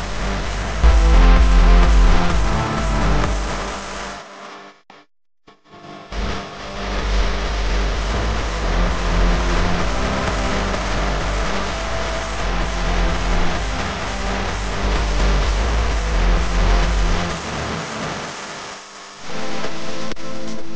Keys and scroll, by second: 2.8 v, 6.7 a.